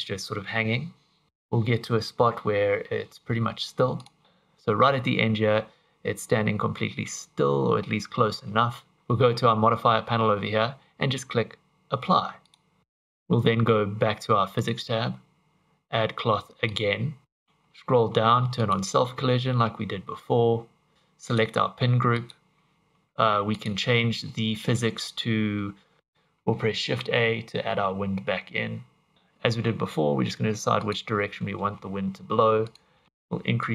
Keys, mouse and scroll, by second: 4.0 click, 9.0 ctrl+z, 12.5 click, 14.6 click, 16.7 click, 17.2-17.9 scroll down 22, 18.7 click, 20.9 click, 21.3 click, 22.8-23.5 scroll up 10, 23.5 click, 26.0 shift+a, 26.8 shift+a, 29.1 ctrl+z, 29.1 r, 29.7 r, 31.9 g, 33.6 click.